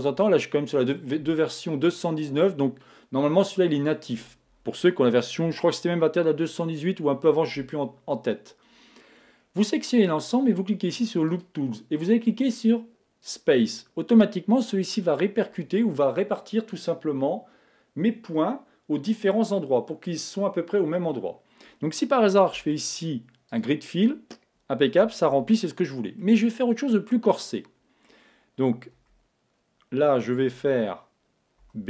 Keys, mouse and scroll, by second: 11.3-13.0 drag, 13.1 click, 14.8 click, 22.6 space, 25.3 super+z, 26.2-28.0 middle drag, 29.0 z, 30.5 a, 31.6 b.